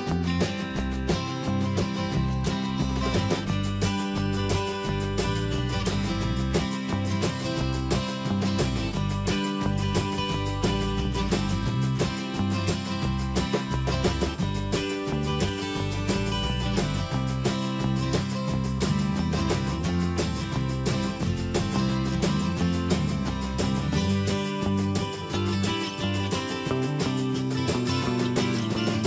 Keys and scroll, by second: 4.8 alt+Up, 7.2 ctrl+shift+,, 9.1 ctrl+h, 11.7 ctrl+a, 17.2 ctrl+Return, 24.3 ctrl+a, 26.2 ctrl+Return, 27.2 ctrl+t.